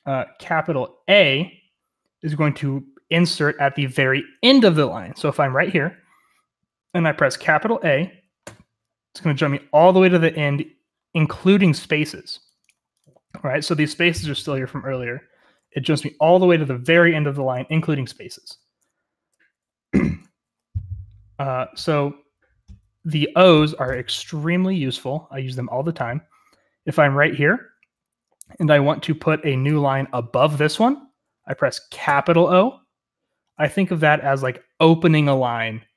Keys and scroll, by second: 8.4 shift+a, 18.4 Escape, 19.6-20.3 h, 24.8-25.1 h, 32.0 o.